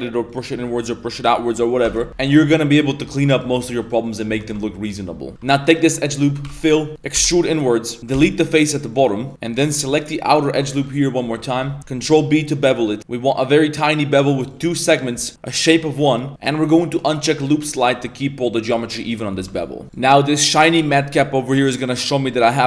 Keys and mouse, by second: 1.2 middle click, 1.8 Tab, 2.2 middle click, 3.0 Tab, 3.2 right click, 3.4 middle click, 3.8 right click, 4.0 middle click, 4.4 Tab, 4.5-5.3 middle drag, 5.3 alt+1, 5.6 alt+right click, 6.0 middle click, 6.5 f, 6.7 middle drag, 7.2 e, 8.1 x, 9.3 middle click, 9.3 2, 10.2 alt+right click, 10.8 z, 10.9 middle drag, 11.4 middle click, 11.9 ctrl+b, 15.3 click, 17.4-18.9 drag, 18.9 middle drag, 19.3 Tab, 19.5 middle drag, 19.8-21.3 drag, 21.5-22.6 middle drag.